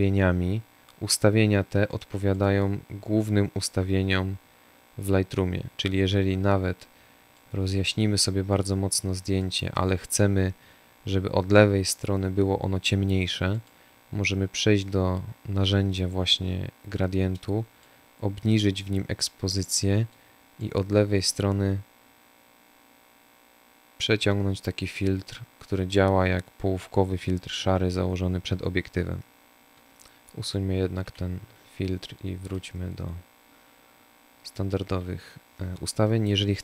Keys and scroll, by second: 29.9 Delete.